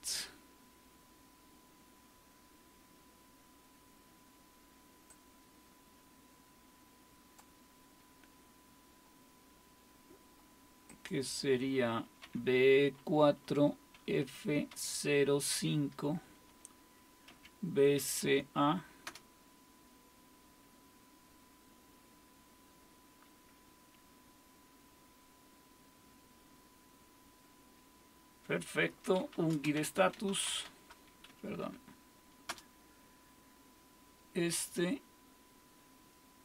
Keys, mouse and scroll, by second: 5.1-12.2 drag, 12.2-15.5 typing, 17.3-18.7 typing, 19.1 Return, 28.8-31.1 typing, 31.3 Up, 31.6 Up, 32.5 Return.